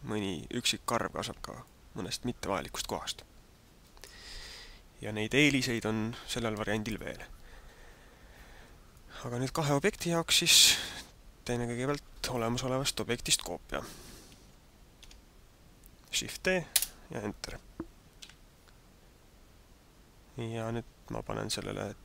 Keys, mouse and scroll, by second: 1.8 middle click, 9.0 middle click, 10.8 middle click, 14.9 shift+d, 18.2 n.